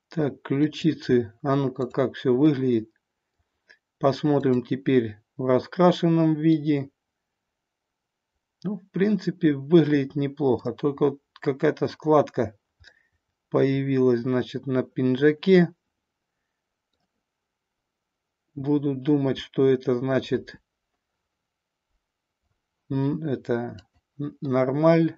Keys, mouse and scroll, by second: 0.6 click, 1.7 click, 2.5-3.5 middle drag, 6.6-10.8 middle drag, 13.0-16.9 middle drag, 20.2 KP_1, 23.7 click, 24.4-25.1 middle drag.